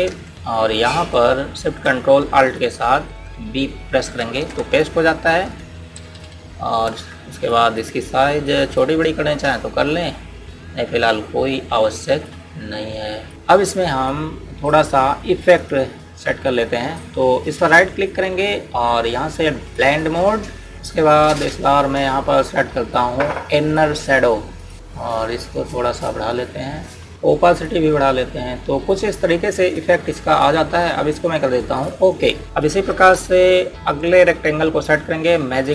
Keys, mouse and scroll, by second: 5.0 ctrl+alt+shift+v, 6.8-9.6 typing, 8.4 click, 9.1 click, 9.5 click, 10.4 click, 18.5 right click, 20.7 click, 27.4 ctrl+z, 28.5 click.